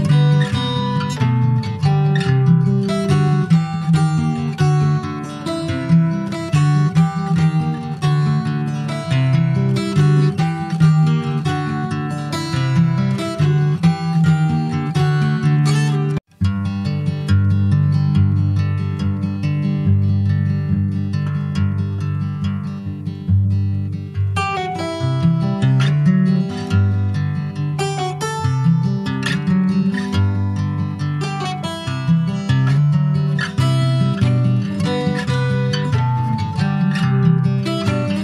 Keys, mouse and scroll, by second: 0.0 click, 3.4 Tab, 3.8 click, 4.3 alt+z, 4.8 middle click, 5.2 ctrl+s, 5.3 click, 5.5-6.8 right drag, 7.2 click, 7.7 /, 8.2 click, 8.5-9.2 scroll down 6, 9.2-10.4 middle drag, 10.4 ctrl+s, 10.5 middle click, 10.9-11.9 scroll up 3, 11.1 shift+middle click, 11.5 middle click, 12.1-13.3 middle drag, 13.3 scroll up 1, 13.6 ctrl+s, 13.8 click, 14.1 Tab, 14.3 scroll up 2, 14.9 middle click, 15.2 scroll up 1, 16.8 3, 17.3 2, 17.5 click, 18.5 alt+shift+click, 19.0 middle click, 19.8 scroll up 1, 19.9 click, 20.4 middle click, 20.6-21.3 scroll up 1, 21.3 click, 21.9 alt+shift+click, 22.4-23.8 middle drag, 23.8 click, 24.6 alt+shift+click, 25.3-27.1 middle drag, 27.1 alt+shift+click, 28.5 alt+middle click, 29.1 alt+z, 29.7 shift+middle click, 30.5 s, 32.4 s, 35.8 middle click, 36.3 alt+z, 36.4 click, 36.8-37.1 scroll down 1, 37.1 middle click, 37.5 scroll up 1, 37.6 Tab, 37.8 middle click.